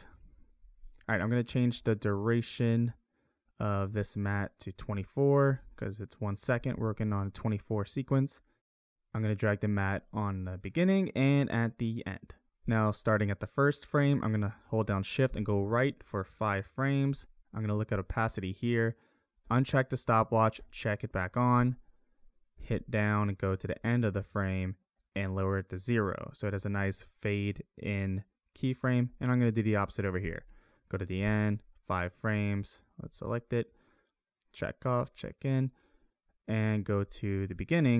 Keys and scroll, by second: 5.5 2, 6.7 4, 8.6 ctrl+z, 12.6 Up, 15.3 shift+Right, 22.6 Down, 29.1 Down, 31.2 shift+Left, 37.0 Up.